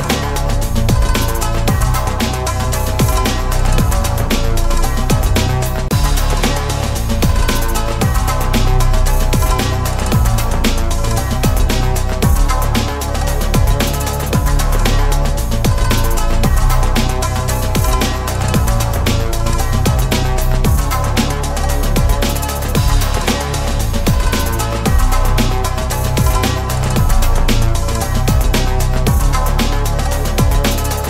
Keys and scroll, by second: 20.0 ctrl+s.